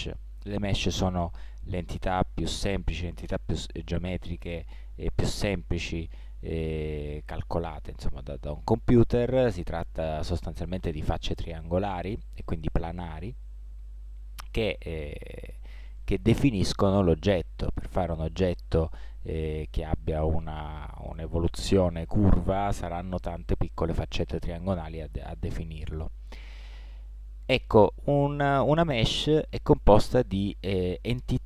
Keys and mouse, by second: 12.9-15.4 middle drag, 19.7-21.3 middle drag, 25.9-27.5 middle drag, 27.8-31.4 middle drag.